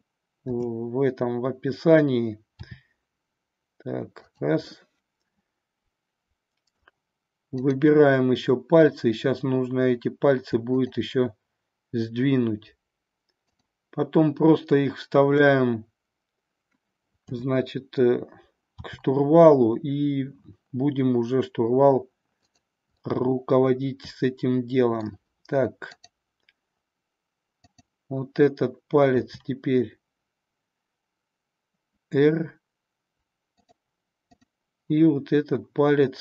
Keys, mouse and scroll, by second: 0.9 KP_7, 2.7 r, 4.7-6.9 middle drag, 10.8-12.9 shift+drag, 13.6-16.1 shift+drag, 17.3 KP_7, 18.7 r, 23.0-25.0 middle drag, 25.8-28.3 drag, 30.7 r, 34.3-36.2 drag.